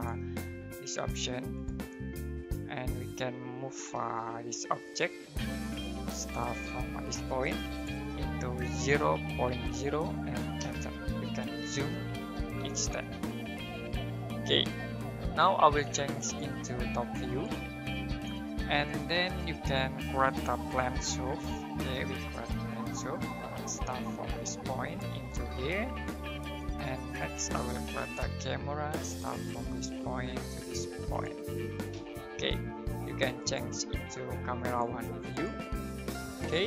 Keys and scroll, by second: 3.6-4.3 typing, 5.9 space, 9.1-13.1 typing, 20.4-22.2 typing, 27.6-28.9 typing, 31.9 space.